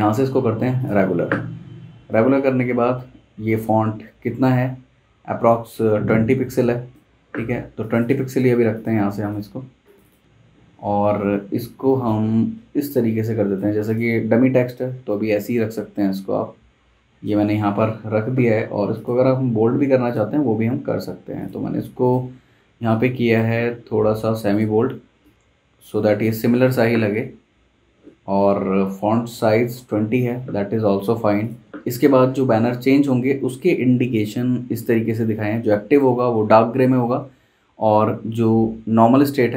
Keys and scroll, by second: 10.2 super+z, 31.0 super+z.